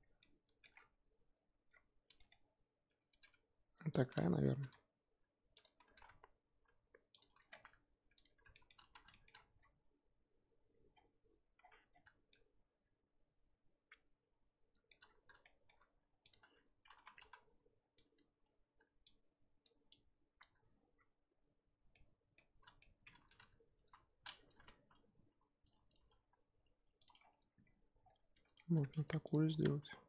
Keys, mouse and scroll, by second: 0.2 scroll down 6, 0.2-0.7 shift+middle drag, 0.7-3.2 scroll up 4, 3.2 g, 5.8 s, 7.5 Tab, 8.0 scroll down 1, 8.1 click, 8.5-8.9 shift+middle drag, 8.9 z, 9.1 shift+middle drag, 9.3-10.9 scroll up 7, 10.9-11.9 scroll down 4, 11.9 scroll down 6, 12.3-15.0 shift+middle drag, 15.0-15.4 scroll up 4, 15.4-15.8 shift+middle drag, 15.8 scroll up 2, 16.3 click, 16.4 Tab, 17.3 z, 18.1 click, 18.4-19.1 scroll up 2, 19.6 shift+click, 20.4 shift+click, 21.9-23.8 middle drag, 23.8 KP_1, 24.6 s, 26.0 s, 28.4 g, 29.6 z, 29.7 Tab, 29.8 scroll down 4.